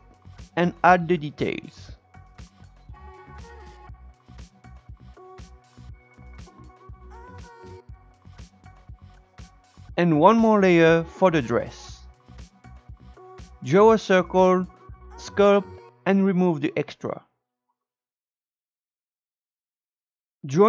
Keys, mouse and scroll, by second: 0.4 Tab, 0.7 click, 1.6 Tab, 1.8 space, 2.3 click, 2.9 space, 3.1-3.4 scroll up 3, 3.4-6.1 shift+drag, 6.1 scroll down 4, 6.8 shift+middle click, 7.3-7.9 scroll down 4, 7.9-9.1 shift+middle drag, 9.5 click, 9.8-10.8 scroll down 4, 10.8-12.1 drag, 12.1 s, 12.7 click, 13.4 Tab, 13.6 click, 13.6 Tab, 13.7 click, 13.8 scroll down 3, 13.9-16.3 drag, 16.3 shift+middle click, 16.4 scroll up 1, 16.4 click, 17.0 shift+middle click, 17.1 click, 17.1 shift+middle click, 17.2 click, 17.6 shift+middle click, 17.8 Tab, 17.9 shift+middle click, 18.5 scroll up 3, 18.6 shift+middle click, 18.7 ctrl+click, 18.9 Tab, 19.0 click, 19.3 Tab, 19.5 click, 19.7 Tab, 19.8 click.